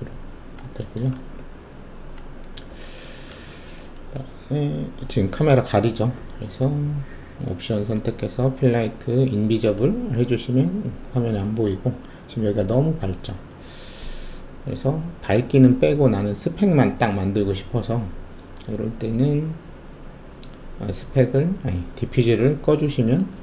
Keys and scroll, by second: 3.8 alt+shift+F1.